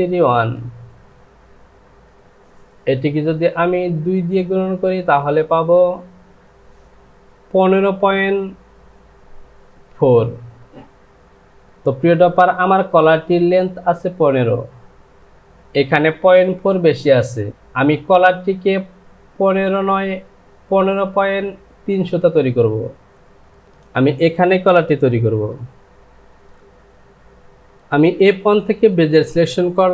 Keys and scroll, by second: 23.6 j, 25.3 Home.